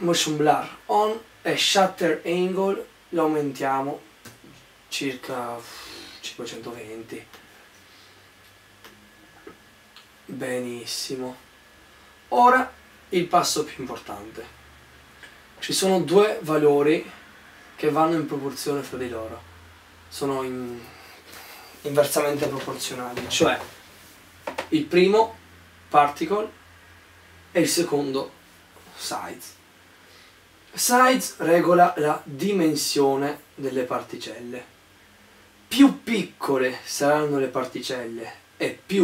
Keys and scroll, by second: 4.4 5, 6.0-6.9 typing.